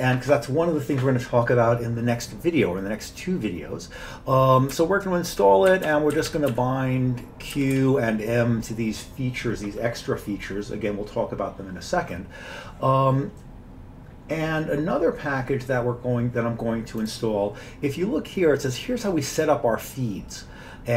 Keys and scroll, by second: 4.8 Up, 5.3 Up, 5.7 Down, 5.9 Down, 6.2 Down, 6.3 Down, 6.5 Down, 7.6 Down, 7.8 Down.